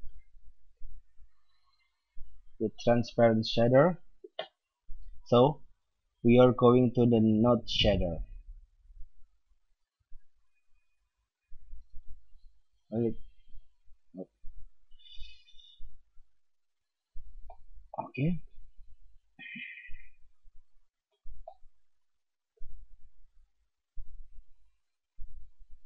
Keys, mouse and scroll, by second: 6.2 middle click, 7.4 middle click, 16.0 alt+a, 17.5-19.3 middle drag, 19.5-21.3 drag, 21.4-25.1 middle drag.